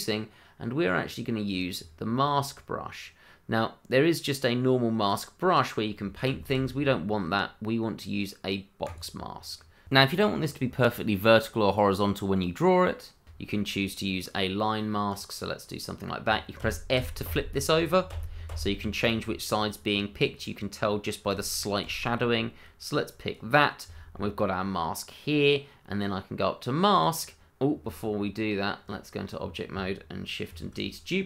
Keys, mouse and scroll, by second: 0.0 middle click, 1.4-4.7 scroll down 1, 5.0 click, 6.4 ctrl+z, 8.8 click, 9.5 middle click, 10.5 click, 12.8 ctrl+z, 13.2 click, 16.6 click, 21.3 click, 24.1 middle click, 26.9 click, 27.8 Tab, 29.4-29.7 scroll down 1, 30.5 shift+d.